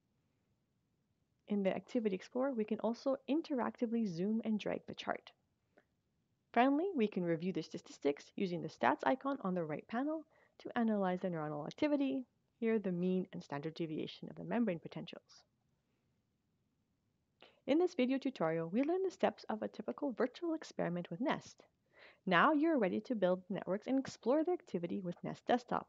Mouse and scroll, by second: 9.5-10.5 drag, 17.2 click.